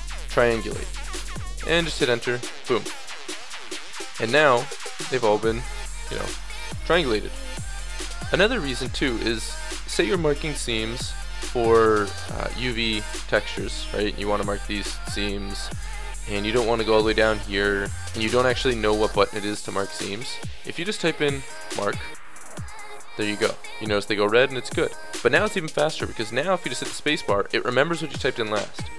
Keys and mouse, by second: 3.1 middle click, 3.7 middle click, 4.0-7.3 middle drag, 7.7 right click, 7.7 click, 8.5 middle click, 8.8 click, 9.2-11.2 middle drag, 9.7 ctrl+z, 11.2-20.2 drag, 12.0-13.9 middle drag, 13.9 right click, 14.4-20.2 middle drag, 20.2 space, 23.5 a, 26.6 space.